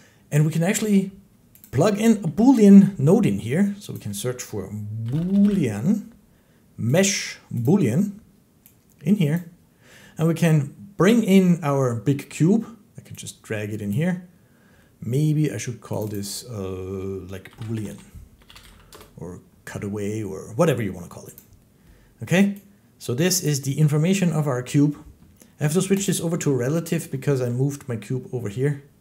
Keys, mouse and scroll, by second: 1.5 click, 2.1 a, 3.8 click, 4.9-5.3 typing, 6.5 typing, 6.8 click, 7.5 click, 9.2 click, 13.8 click, 15.9 click, 16.0 click, 17.3-18.6 typing, 18.8 Return, 19.8 typing, 21.2 click, 23.3 click, 25.9 click, 27.3 click.